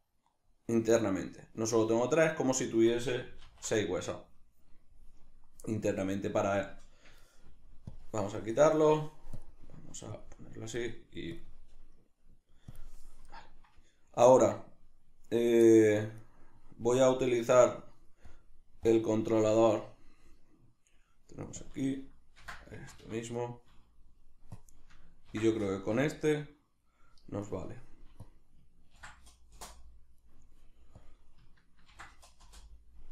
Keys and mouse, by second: 3.4 alt+r, 9.4-10.8 drag, 11.3-15.7 drag, 15.7-16.3 ctrl+middle drag, 16.3 right click, 17.1 right click, 18.3 click, 18.8 click, 19.5 click, 20.1-21.6 middle drag, 21.6-23.3 drag, 22.9 Escape, 23.3 right click, 24.6-27.4 drag, 25.9 Return, 27.4 right click, 28.2-30.2 drag, 29.6 Return, 30.2 right click, 31.0-33.1 drag, 32.6 Return.